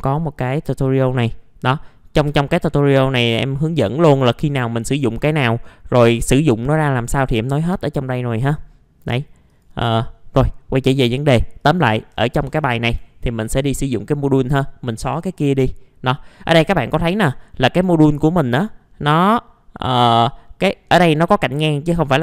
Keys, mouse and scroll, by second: 0.8 click, 4.3-4.8 scroll down 1, 5.0-9.5 scroll up 1, 9.5 click, 10.3 middle click, 10.8 click, 12.9 Delete, 13.2 click, 14.3 middle click, 16.2-17.0 scroll up 1, 17.0 middle click, 17.8 click, 18.4 middle click, 19.0-19.8 scroll up 1.